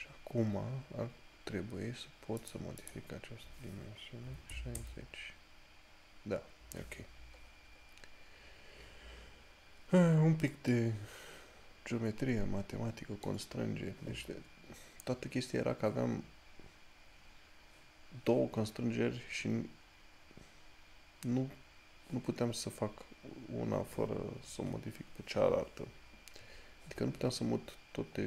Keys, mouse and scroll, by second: 3.0 click, 7.7 scroll down 1, 11.0 middle click, 21.0 scroll up 1.